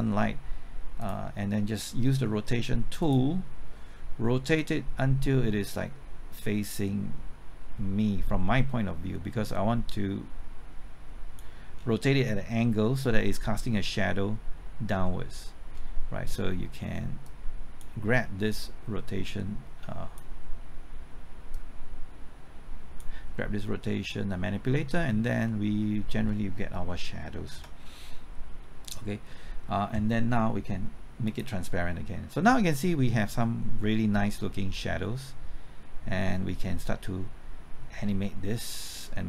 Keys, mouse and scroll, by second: 11.7 scroll down 1, 12.0-15.0 middle drag, 17.4-23.3 drag, 23.3-26.7 middle drag, 27.5 KP_0, 31.2-39.2 drag.